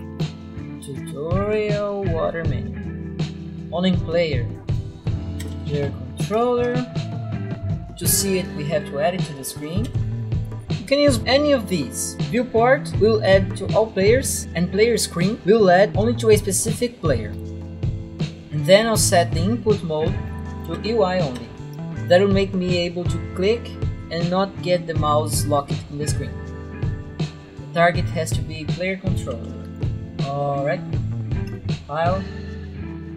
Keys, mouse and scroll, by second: 0.0-1.5 typing, 0.6 click, 2.3 click, 3.9 click, 4.5-6.3 typing, 6.6 Return, 7.1 click, 7.3 click, 7.5 right click, 7.6 click, 9.0-10.7 typing, 11.1 Up, 11.1 Down, 12.2 Down, 17.3 Return, 17.5 click, 17.8 click, 17.8 right click, 18.9 click, 20.0-21.6 typing, 21.7 Return, 22.2 click, 23.7 right click, 27.6 click, 28.8-30.2 typing, 29.9 click, 31.5 click.